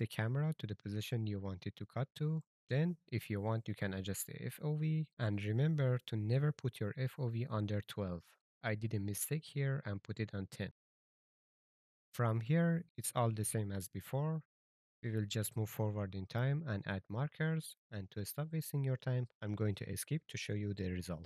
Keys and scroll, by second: 0.7 s, 3.3-6.3 typing, 3.8 Return, 7.4 s, 7.8 a, 14.7-15.6 typing, 18.1 shift+w, 18.7 d, 20.6 a.